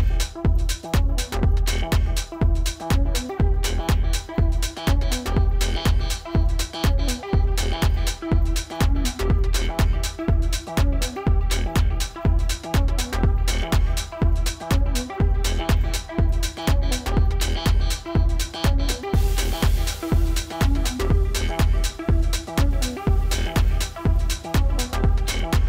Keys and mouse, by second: 0.0-0.3 typing, 1.5-2.2 typing, 3.2 ctrl+-, 3.5 space, 3.6 click, 5.4-7.3 typing, 5.7 click, 6.5 F8, 9.1 space, 9.3 click, 9.6 space, 13.8 click, 18.5-19.0 typing, 21.5 click, 24.0 space, 24.2 click, 24.5 space.